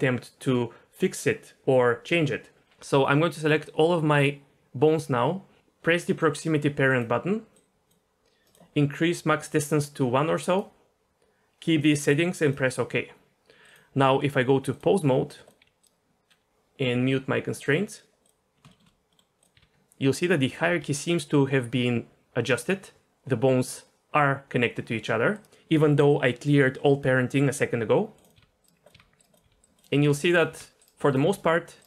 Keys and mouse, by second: 2.9 a, 7.0-12.5 drag, 13.7-14.8 drag, 15.6 r, 17.6 click, 18.0 r, 18.7 shift+middle drag, 19.1 middle click, 19.4 click, 19.5 r, 20.5 r, 23.0 r, 28.1 click, 28.3-31.2 typing, 29.3 click, 29.7 click, 31.1 click.